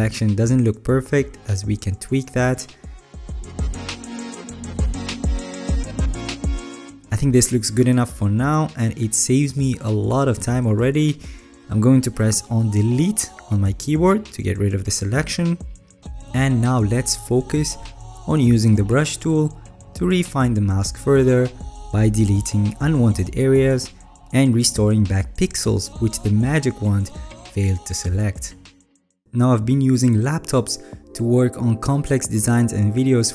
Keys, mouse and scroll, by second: 14.5 ctrl+d, 19.2-21.2 alt+right drag, 21.8-22.8 alt+scroll up 8, 23.4 alt+right click, 24.4 alt+scroll.